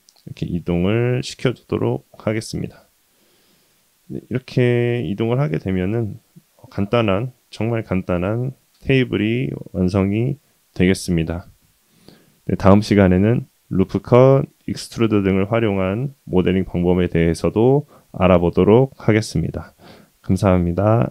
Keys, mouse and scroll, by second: 1.6-3.8 middle drag, 4.1-5.2 middle drag, 5.5 click, 5.9-6.4 scroll down 1, 6.4-6.7 middle drag, 7.2-7.8 drag, 9.2-9.8 middle drag, 10.1 middle drag, 10.8 scroll down 1, 11.2 click, 11.7-12.0 middle drag, 12.2-13.0 scroll up 1, 13.0 middle click, 13.0 scroll up 2, 13.7-14.1 middle drag, 14.3 click, 15.8-17.2 middle drag, 17.3-17.9 scroll down 2, 17.9-18.2 middle drag, 20.0-20.4 middle drag, 20.5 middle click.